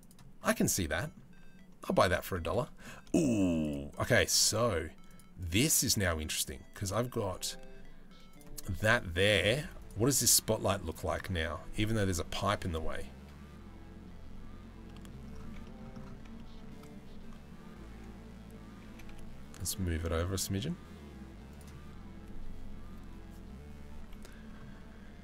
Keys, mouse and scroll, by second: 0.5 middle drag, 1.4 middle click, 2.1-2.4 middle drag, 3.2 click, 3.5 click, 4.7 click, 5.0 right click, 5.5 middle click, 5.9 right click, 7.9 right click, 14.4 middle click, 15.3 shift+middle click, 18.4 g.